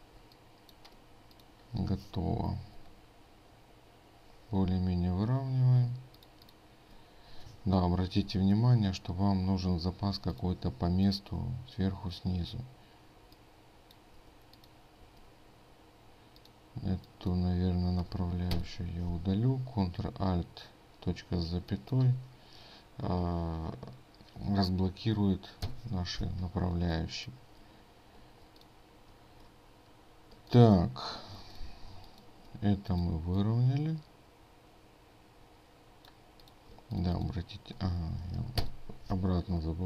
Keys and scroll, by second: 5.9 ctrl+space, 36.9 ctrl+space.